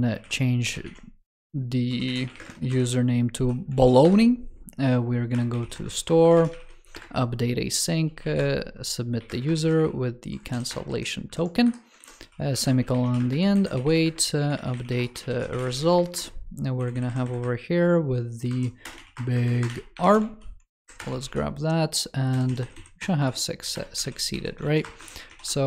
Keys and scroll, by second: 3.6 super+s, 11.1 super+Right, 11.8 super+Right, 12.4 super+Left, 13.4 super+Left, 16.9 alt+Left, 19.9 ctrl+s, 20.1 super+c, 20.6 super+Right, 20.9 super+v, 23.9 ctrl+s.